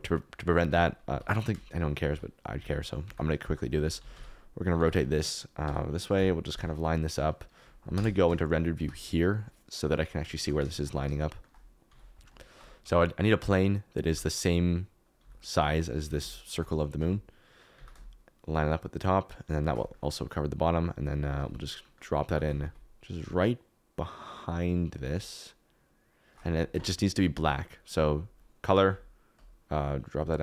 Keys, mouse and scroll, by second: 0.6 Tab, 1.0 a, 2.1 f, 2.5 alt+z, 3.0 Tab, 3.5 middle click, 3.7 alt+z, 3.9-6.1 typing, 7.9 KP_0, 8.7 z, 10.3 shift+click, 10.7 shift+click, 11.8 s, 12.8 s, 14.1 g, 15.2 s, 16.0 g, 16.5 shift+click, 16.9 s, 17.7 g, 19.3 shift+middle click, 20.3-21.5 middle drag, 21.5 z, 22.2 g, 22.4 z, 22.6 z.